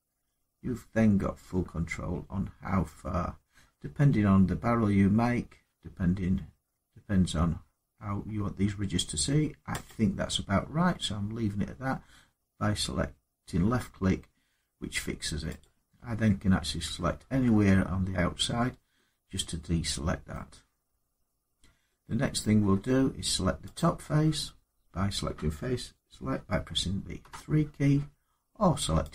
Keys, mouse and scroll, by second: 1.0 middle click, 4.0 middle click, 7.9 middle click, 9.6 click, 10.5 middle click, 10.5 middle click, 15.4 click, 18.3 scroll down 3, 18.7 middle click, 20.1 middle click, 21.0-21.3 scroll down 2, 21.3-21.7 scroll up 2, 22.2 middle click, 27.0 3, 28.9 click.